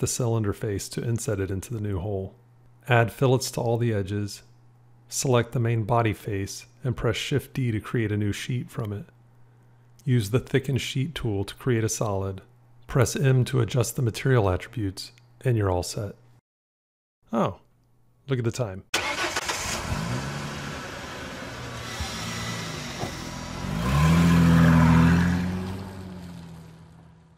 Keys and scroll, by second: 13.1 m.